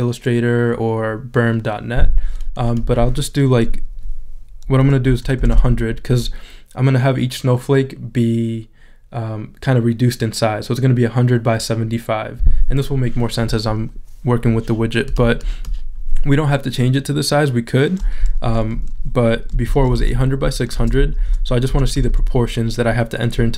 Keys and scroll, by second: 5.1 |, 6.5 0, 19.7 8.